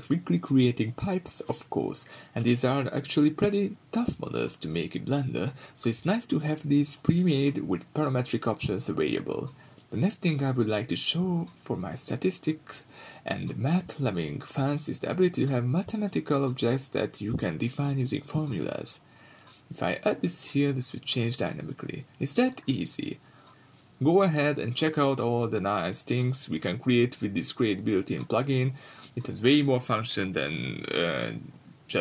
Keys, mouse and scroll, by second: 1.0-1.5 scroll down 2, 1.5-9.5 drag, 6.9 x, 7.2 shift+a, 9.5-10.8 middle drag, 10.8-17.1 drag, 18.7-19.1 scroll down 1, 19.3 x, 19.6 scroll up 1, 19.8 shift+a, 22.6 click, 25.7 Return, 27.3 click, 27.3 scroll down 1, 27.4 middle click, 28.2 scroll up 1, 28.4 right click, 28.8 middle click, 29.4 KP_1, 30.0 x, 30.6-32.0 middle drag, 30.7 scroll up 2, 30.9 shift+a.